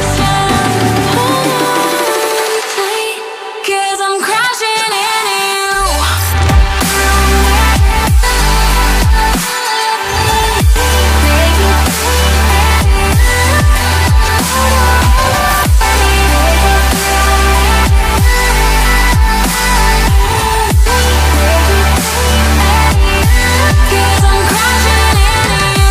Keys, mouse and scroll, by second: 3.0 Delete, 4.8 Delete, 6.5 ctrl+v, 11.5 Delete, 12.9 Delete, 15.1 ctrl+v, 18.6 double click, 19.2 Delete, 21.2 Delete, 23.5 ctrl+v, 24.9 ctrl+z.